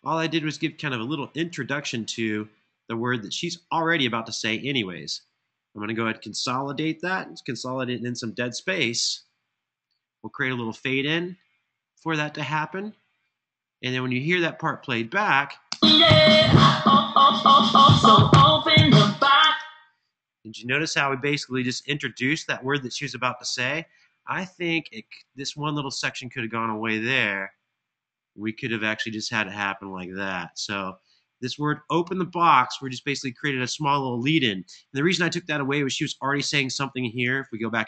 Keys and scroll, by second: 7.9 alt+shift+3, 15.4 space, 19.2 space, 21.5 super+[, 37.2 super+z.